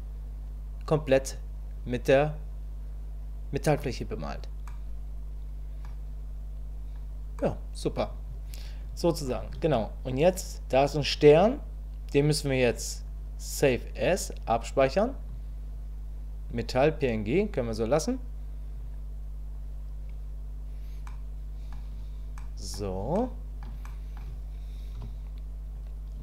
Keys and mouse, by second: 4.7-5.9 middle drag, 7.4 middle click, 12.7-14.7 drag, 21.1 middle click, 21.5 middle click, 22.4 middle click, 23.1 shift+middle click, 23.9 middle click, 25.0 KP_1.